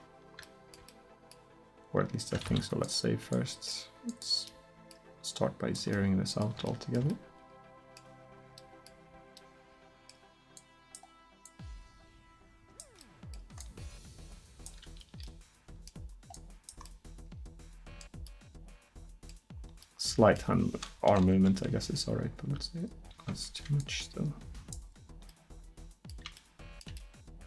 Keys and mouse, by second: 2.5 ctrl+s, 6.4 middle click, 6.7-7.0 drag, 10.6-15.4 drag, 15.4 middle click, 16.4-18.3 middle drag, 20.3-21.1 middle drag, 21.1 KP_1, 21.4 KP_7, 22.4 r, 25.0-25.3 middle drag, 25.3 click, 25.5 middle click, 25.7 middle click, 25.7 drag, 26.1 middle drag, 26.4 drag, 26.4 middle drag.